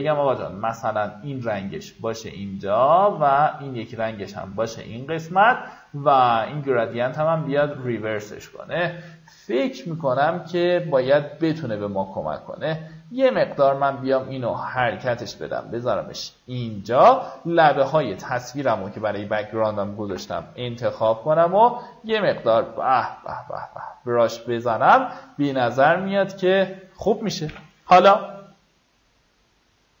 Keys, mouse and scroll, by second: 9.7-10.2 alt+scroll down 1, 10.3-11.1 alt+scroll up 1, 11.4-17.0 drag, 20.5 b, 21.0 alt+right click, 22.2-24.8 drag, 25.0-25.3 alt+scroll down 1, 25.7 a, 26.4 click, 27.8 v, 29.3 click.